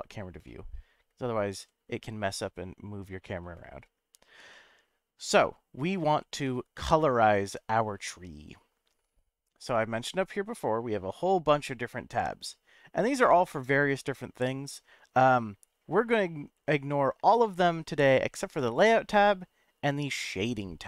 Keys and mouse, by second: 0.4-1.2 middle drag, 1.5 n, 6.4-7.9 middle drag, 18.6 click.